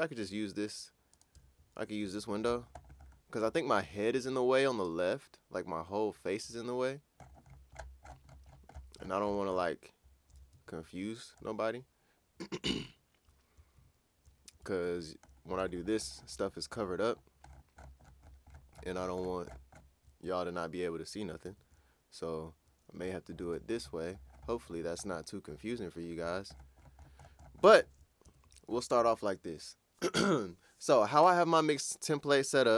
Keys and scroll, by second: 1.3 super+`, 10.5 super+`, 13.8 super+`, 14.8 super+`, 21.4 super+`, 28.2 super+`.